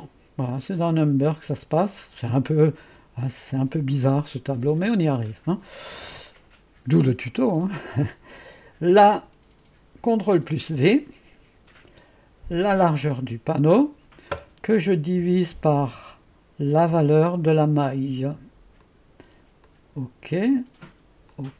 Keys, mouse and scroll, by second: 0.0 click, 2.7 click, 4.6 click, 10.7 ctrl+v, 13.2 click, 15.2 /, 16.9 ctrl+v, 18.9 click, 19.7 click, 21.3 click.